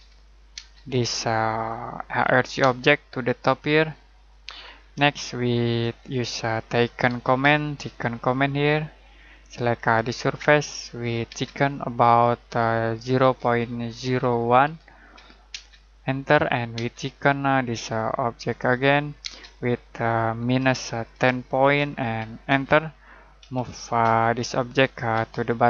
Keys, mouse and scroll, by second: 0.0-0.5 typing, 2.0 click, 2.5 space, 4.1 click, 4.6-5.0 scroll down 1, 5.1 shift+middle click, 6.0-7.0 scroll up 1, 7.0-7.4 typing, 11.3 space, 13.0-15.4 typing, 18.3 click, 19.2 space, 20.4-24.0 typing, 24.4 click, 25.1 space, 25.3 click.